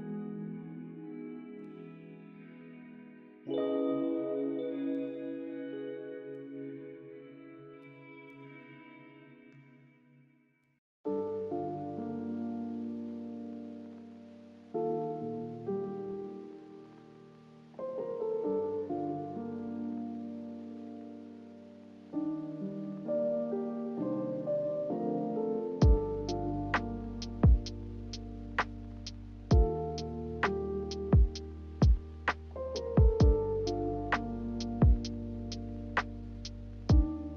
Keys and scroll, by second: 9.8 n, 12.3 Delete, 14.6 m, 16.9 m, 26.8 a, 31.6 b, 34.8-35.7 typing, 35.8 Return.